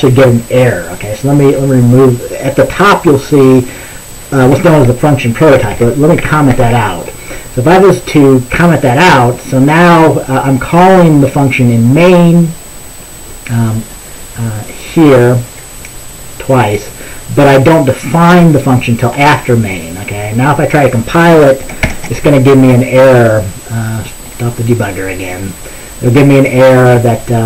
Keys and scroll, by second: 5.8 typing, 6.6 ctrl+s, 22.0 ctrl+b.